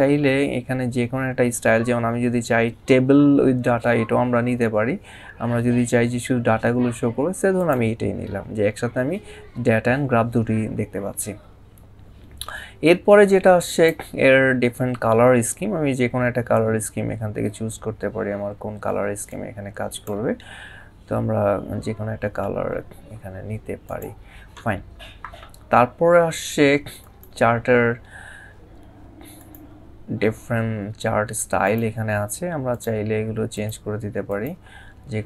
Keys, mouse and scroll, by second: 7.4 click, 13.5 click, 19.1 click, 22.9-23.6 scroll up 1, 26.8 click, 29.2 click, 31.5 click.